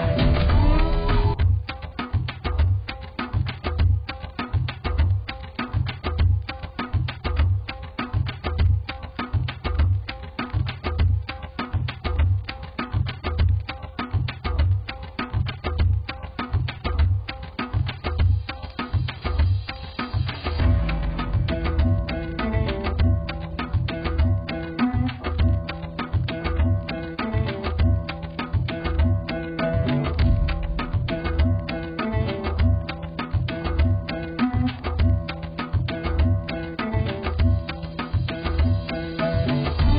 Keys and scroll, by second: 18.5 z.